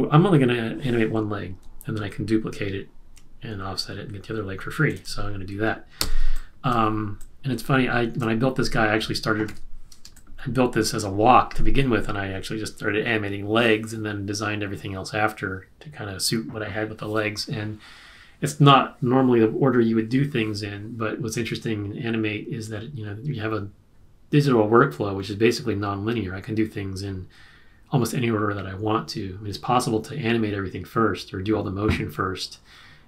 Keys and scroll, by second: 6.0 z, 9.4 super+-, 10.2 space.